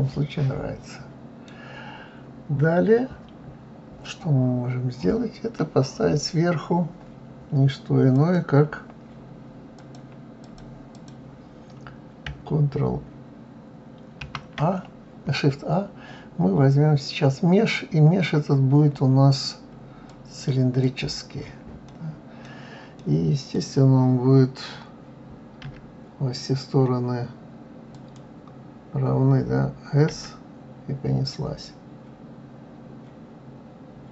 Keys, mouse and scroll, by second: 8.1 click, 9.8-11.0 drag, 14.1 shift+a, 20.7 click, 21.8-25.6 middle drag, 25.6 s, 27.9 click, 30.1 s.